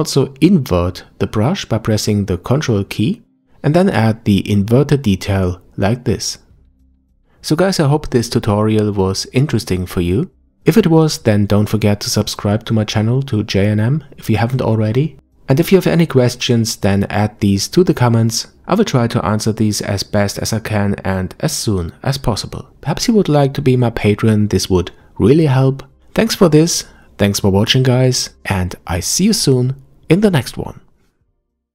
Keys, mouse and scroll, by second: 0.0-2.5 scroll up 2, 2.5 f, 5.0-7.1 ctrl+drag, 8.3-8.8 scroll down 1, 8.8-11.4 middle drag, 11.4-11.8 scroll up 1.